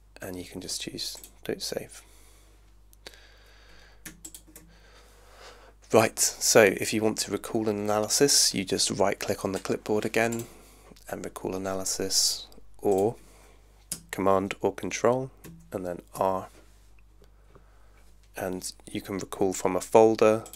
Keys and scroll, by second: 15.4 super+r.